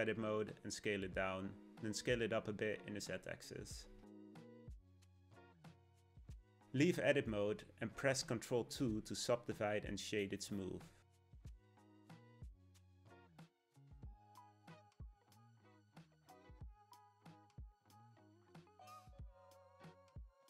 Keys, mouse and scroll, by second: 0.5 s, 3.0 s, 6.1-6.9 scroll up 2, 6.9 Tab, 8.9 ctrl+2, 10.5-13.2 right drag, 13.2 KP_1, 15.4 middle click, 16.3-16.8 scroll down 2, 16.8 g, 19.0 KP_1, 19.6 shift+KP_1, 20.3 shift+KP_1.